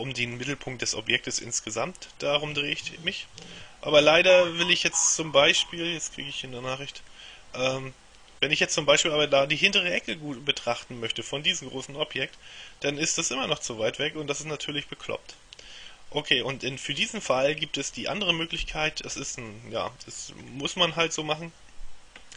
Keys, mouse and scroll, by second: 1.9-6.1 middle drag, 7.2-9.4 middle drag, 12.4-15.1 middle drag, 15.4-18.0 middle drag, 18.7 KP_7, 19.9-21.5 scroll down 1.